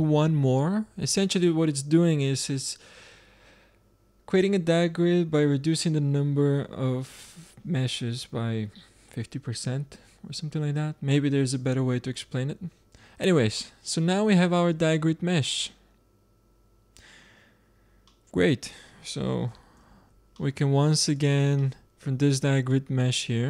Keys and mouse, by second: 13.5-14.3 middle drag, 15.9-18.0 middle drag, 18.0-19.4 drag, 19.7 shift+d, 21.7-23.4 drag.